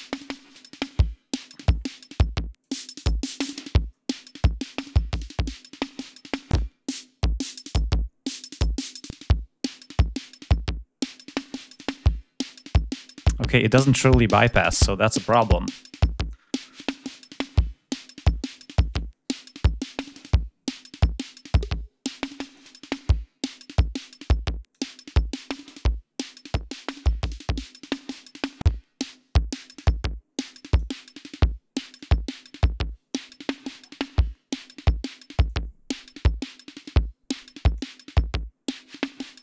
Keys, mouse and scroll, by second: 2.4 click, 3.3 click, 4.9 click, 6.3 click, 8.9 click, 11.5 click, 19.8 click, 21.3 click, 23.6 click, 25.5-27.8 drag, 28.9 click, 30.3 click, 31.8 click, 35.3-37.8 drag, 38.1 click.